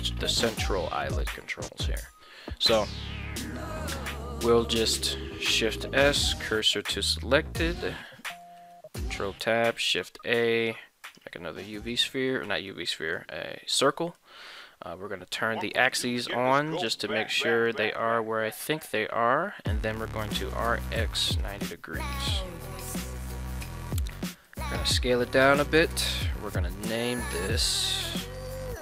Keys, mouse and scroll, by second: 5.7 shift+s, 7.8 shift+middle click, 8.6 ctrl+Tab, 9.1 shift+a, 11.8 middle drag, 12.7-13.2 middle drag, 14.0 middle click, 15.9 click, 20.2 r, 20.5 x, 21.1 9, 21.4 0, 22.2 Return, 23.5 middle drag, 24.4 s, 25.6 click, 28.3-28.8 drag.